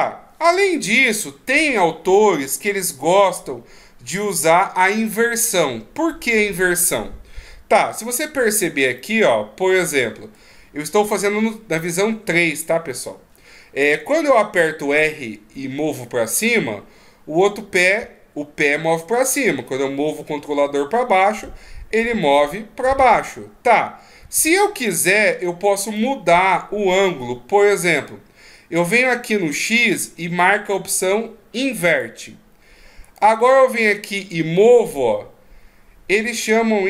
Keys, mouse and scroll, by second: 8.4 right click, 9.0 middle click, 11.0 KP_3, 12.7-13.0 ctrl+scroll down 1, 14.4 r, 25.8 right click, 31.8 click, 33.0 right click, 34.4 right click.